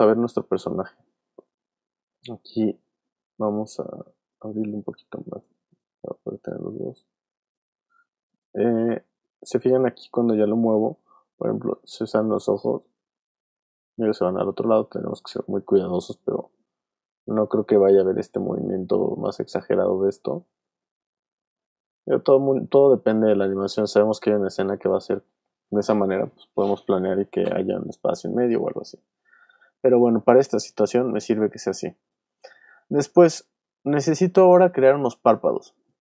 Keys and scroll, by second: 28.3 super+z.